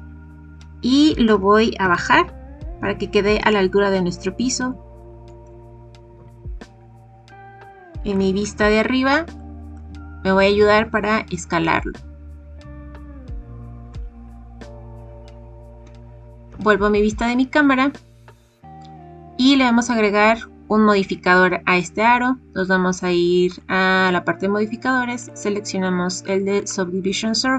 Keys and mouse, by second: 1.3 g, 1.8 z, 6.1 KP_7, 8.1-8.6 shift+middle drag, 9.5 shift+middle click, 11.2 s, 13.9 click, 16.4 KP_0, 23.5 click, 25.2-27.5 drag.